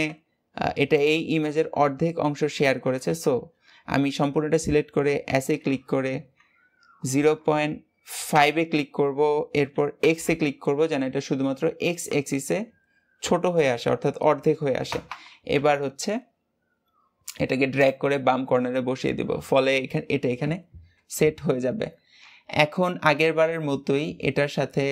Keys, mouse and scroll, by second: 20.3 Tab, 22.1 Tab, 22.7-23.3 scroll up 1, 23.3 Tab, 23.7-24.3 scroll down 2, 24.7-24.9 scroll up 2.